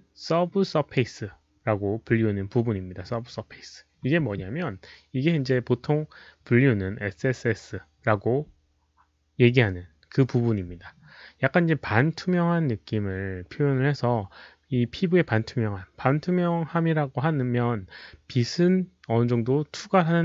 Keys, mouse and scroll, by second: 4.7 click.